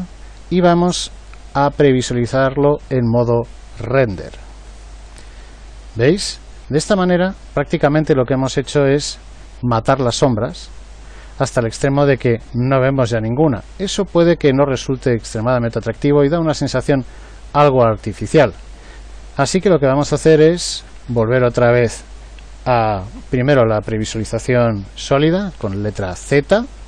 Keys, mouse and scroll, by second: 25.6 z, 26.2 z.